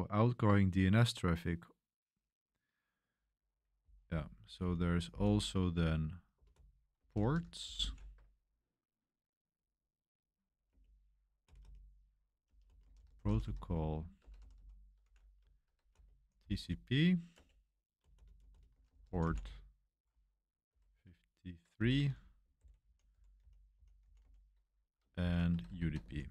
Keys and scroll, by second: 3.5-8.3 typing, 10.6 Return, 11.4-26.3 typing, 17.3 Return, 21.7 Escape.